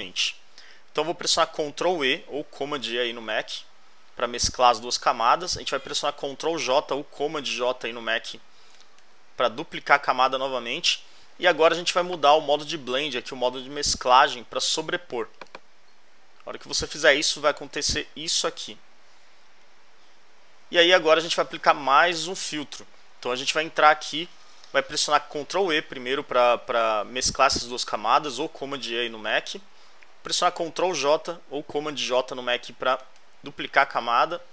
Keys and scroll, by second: 3.8 super+e, 8.7 super+j, 18.4 alt+Left, 28.9 super+e, 32.9 super+j.